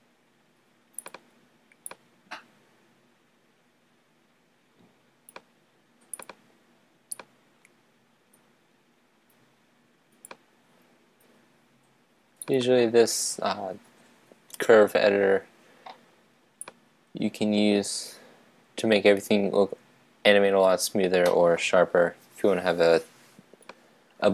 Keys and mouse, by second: 2.0-3.2 right drag, 3.2 click, 7.3-9.0 drag, 16.8-18.6 right drag.